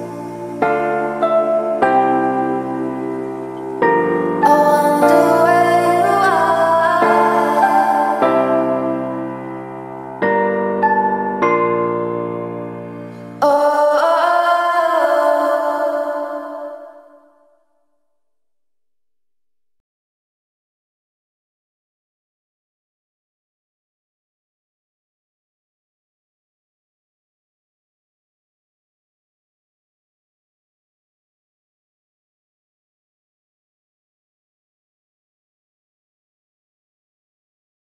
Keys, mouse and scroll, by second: 0.0-0.2 typing, 2.0-8.2 drag, 8.5-8.8 typing, 8.9 Return, 9.7 click, 10.3 F10, 11.0 click, 11.4-14.1 typing, 11.9 click, 16.8-17.9 drag, 19.8 KP_3, 20.4 click, 21.2 KP_0, 21.4 click, 22.4 KP_0, 22.8 click, 23.3 KP_3, 24.0 Return, 26.0 click, 26.6 KP_3, 27.4 Return, 30.5 click, 30.6 F11, 31.6 click, 32.9 F11, 33.6 click.